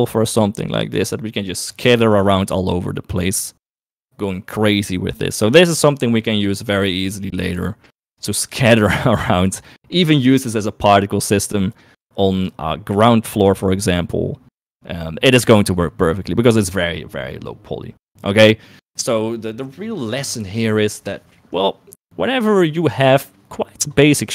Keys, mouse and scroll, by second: 8.4 shift+middle click, 9.4 shift+middle click.